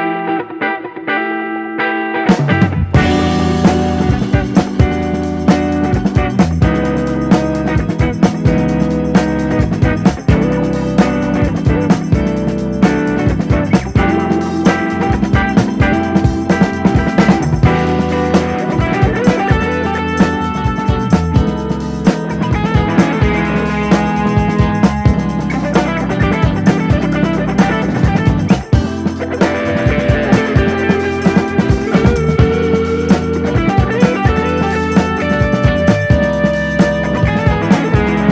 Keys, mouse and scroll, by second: 0.2 alt+/, 0.6-3.4 drag, 4.0-5.0 drag, 5.2-6.2 drag, 7.0-8.0 drag, 8.4-9.6 drag, 9.8-10.8 drag, 11.0 scroll down 3, 11.2 alt+/, 11.4-12.4 middle drag, 12.4 click, 13.0 KP_1, 13.3-13.6 scroll up 1, 13.7 alt+/, 13.9 scroll up 1, 14.1 alt+/, 14.3 scroll down 1, 14.4 middle click, 15.0 click, 15.1 scroll down 1, 15.2 middle click, 16.0 click, 16.1 KP_7, 16.3-16.9 scroll up 3, 16.6 alt+/, 16.9 shift+middle click, 17.6 l, 17.7 l, 18.1 l, 18.6 g, 19.5 click, 19.9 l, 20.2 l, 20.6 h, 21.1 ctrl+z, 21.4 g, 22.3 click, 22.7 l, 23.1 g, 24.1 click, 24.5-29.7 typing, 25.8 click, 27.3 click, 29.0 click, 30.2 scroll down 1, 30.4 middle click, 30.6 alt+/, 30.8 middle click, 31.1 click, 31.2 scroll down 2, 31.4 middle click, 31.9 Tab, 32.0 click, 32.2-32.7 scroll down 1, 32.7-33.6 middle drag, 33.6 click, 34.0 KP_3, 34.7-35.0 scroll up 2, 35.0 click, 36.2 shift+middle drag, 36.4 scroll up 1, 36.6 r, 38.1 scroll down 1, 38.2 shift+middle click.